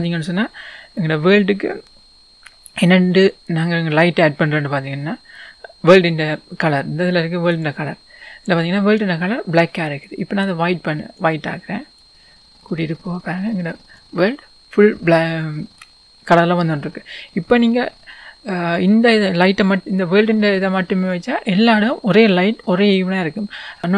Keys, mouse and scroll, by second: 0.2 scroll down 1, 4.4-5.2 scroll up 1, 16.6 scroll down 1, 17.3-20.2 scroll up 2, 20.2 scroll down 1, 20.8-21.5 scroll down 1, 21.5-22.2 scroll up 2, 23.7-23.9 scroll down 2.